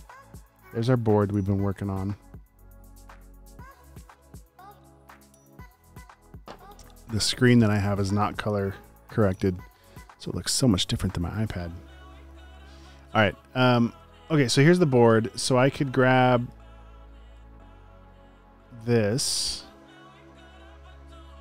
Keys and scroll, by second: 9.9 space, 10.4 space, 12.1 space, 12.6 space, 13.7 space, 18.9 super+c.